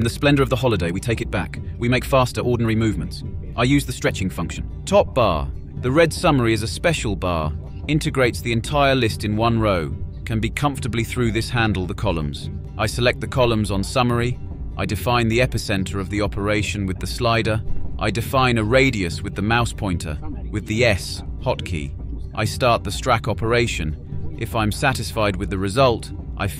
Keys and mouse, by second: 11.1 click, 11.7-12.4 drag, 11.7 typing, 12.9 click, 15.9 click, 16.4 click, 19.2 s, 25.3 drag, 26.0-26.5 drag.